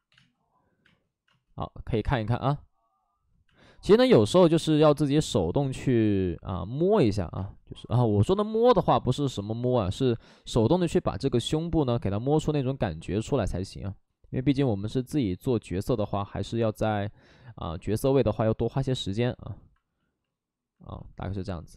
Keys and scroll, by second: 0.0 2, 0.0 space, 6.6 space, 7.3 space, 9.7 z, 16.7 ctrl+z.